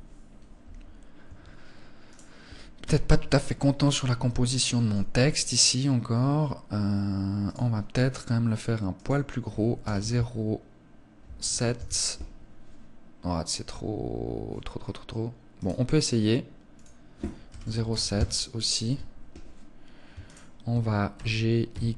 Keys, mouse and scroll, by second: 0.5 Escape, 1.3 right click, 2.0 KP_1, 3.1 scroll up 3, 3.7 shift+middle click, 4.5 scroll up 1, 6.7 click, 7.4 scroll down 2, 7.6-8.2 scroll up 1, 8.2 click, 14.0 scroll down 1, 14.8 right click, 14.8-15.6 scroll down 1, 16.0 click, 19.5 shift+right click, 20.4 g.